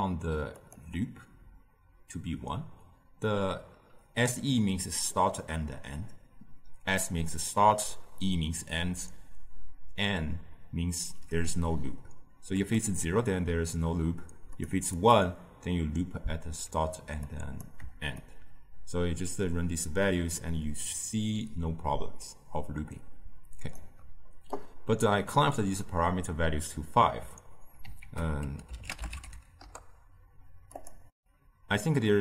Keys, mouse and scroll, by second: 0.7-21.2 drag, 29.6 ctrl+a, 31.1-32.2 drag.